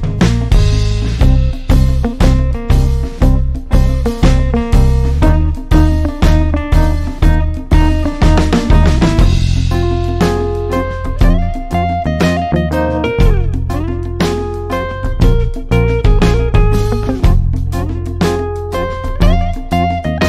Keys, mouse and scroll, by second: 6.4 ctrl+z, 11.3 click.